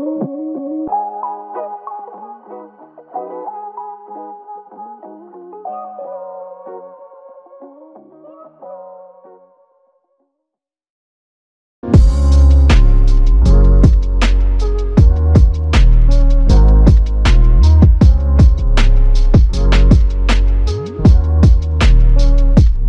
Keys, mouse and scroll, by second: 2.4 alt+click, 6.3 shift+click, 7.5 shift+click, 9.6 double click, 13.2 shift+click, 16.6 shift+click, 19.2 typing.